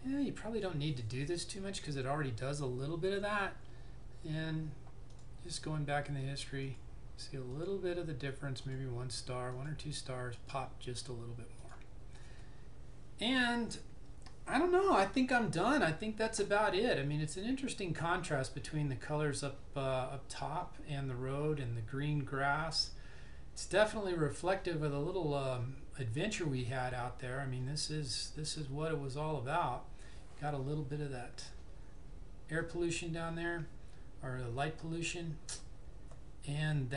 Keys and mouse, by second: 5.2 click.